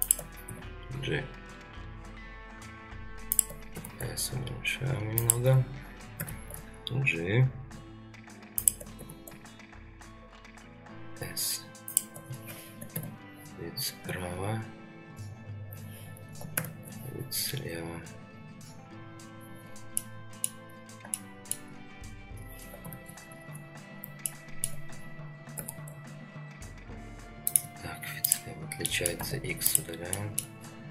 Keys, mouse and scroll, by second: 0.5 g, 3.7 s, 6.2 g, 9.0 s, 12.9 KP_3, 16.5 ctrl+KP_3, 19.5 scroll down 1, 20.0-20.5 middle drag, 20.0 scroll down 1, 20.7-21.0 scroll down 1, 21.1-21.5 shift+middle drag, 22.9 ctrl+KP_3, 23.9-24.2 scroll up 3, 24.3-24.7 shift+middle drag, 25.6 s, 27.8-28.3 scroll down 2, 28.3 click, 28.9 middle click, 29.2 x, 30.1 middle click, 30.6-30.9 scroll down 2.